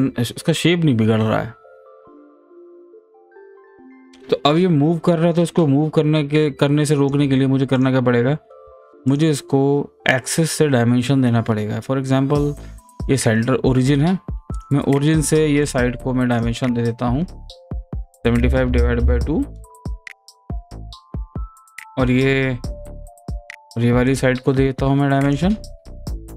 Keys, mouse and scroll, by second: 3.7 click, 5.5-7.7 drag, 14.5 click, 15.7 click, 16.4 click, 24.1 click.